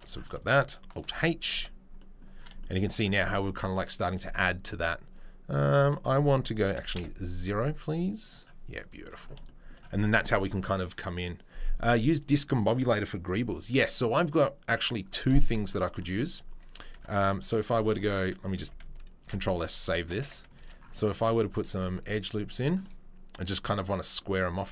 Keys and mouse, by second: 0.5 alt+click, 1.0 alt+h, 1.5 Tab, 2.5-2.9 shift+middle drag, 5.9-8.3 right drag, 8.3-16.2 middle drag, 16.2 click, 17.8 ctrl+r, 18.6 Tab, 19.5 ctrl+s, 20.0 middle click, 20.2 Tab, 20.5 ctrl+click, 20.6 ctrl+r, 20.7-21.9 middle drag, 21.9 ctrl+click, 22.0 ctrl+r, 22.1-24.6 middle drag, 24.6 ctrl+click, 24.6 middle click.